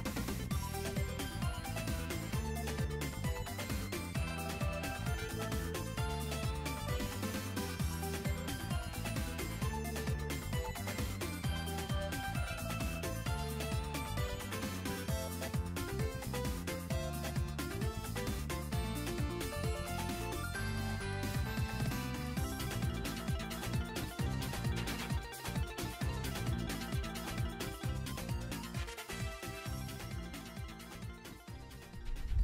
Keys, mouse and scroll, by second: 0.6 click, 3.4 scroll up 2, 3.7 r, 4.5 r, 7.5 r, 8.7-11.2 drag, 11.6 middle click, 11.8-12.8 scroll down 4, 13.3 click, 13.8 click, 18.1 r, 19.2 r, 31.3-32.0 scroll down 3, 32.0 scroll down 2, 32.3 shift+middle click.